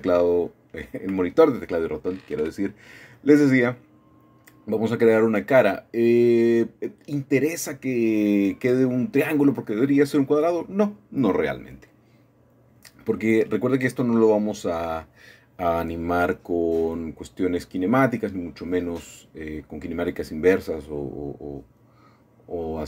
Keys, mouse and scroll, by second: 0.1-1.3 shift+middle drag, 1.9 alt+shift+click, 4.7-7.4 shift+middle drag, 7.5 shift+click, 8.7-10.5 shift+middle drag, 11.1-12.8 shift+middle drag, 12.8 shift+click, 13.8-16.3 middle drag, 16.8 c, 17.3-20.1 middle drag, 18.9 Escape, 21.8 shift+click.